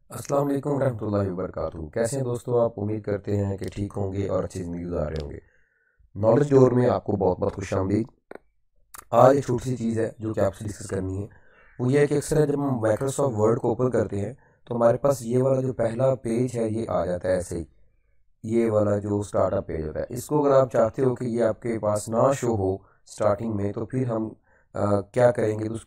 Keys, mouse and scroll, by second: 2.4 typing, 8.3 right click, 8.3-9.9 typing, 9.4 click, 10.1 right click, 10.8 click, 11.2-11.9 typing, 11.2 right click, 11.8 click, 13.9 click, 13.9 typing, 16.4-17.2 typing.